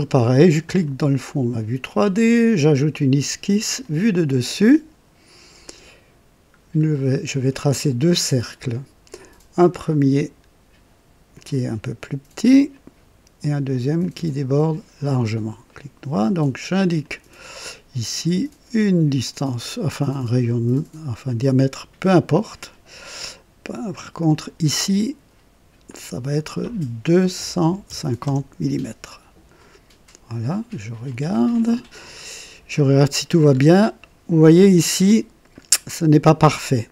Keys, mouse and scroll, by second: 0.6 click, 2.6 click, 3.8 click, 5.6 click, 6.5 scroll down 1, 6.9-8.2 right drag, 9.7 click, 11.3 click, 12.6 click, 13.9 click, 15.0 click, 15.6 right click, 16.9 click, 18.0 click, 19.2 click, 21.2-22.2 drag, 24.2 click, 25.8 click, 27.3 KP_2, 27.7 KP_5, 27.8 KP_0, 28.2 Return, 31.0 click, 32.1-32.4 scroll up 1, 32.7 right click, 33.5 scroll up 1, 34.0 right click.